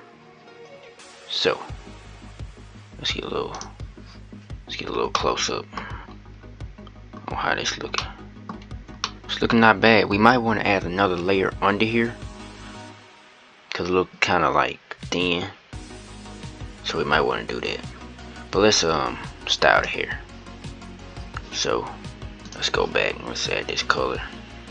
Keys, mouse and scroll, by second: 3.3 click, 4.9 shift+middle click, 5.7-6.9 scroll up 4, 6.9 scroll down 1, 7.7-12.4 middle drag, 14.6-17.1 scroll down 1, 17.1-17.8 scroll down 1, 19.6 click, 22.3 click, 22.9 scroll up 2, 23.6-24.7 scroll down 2.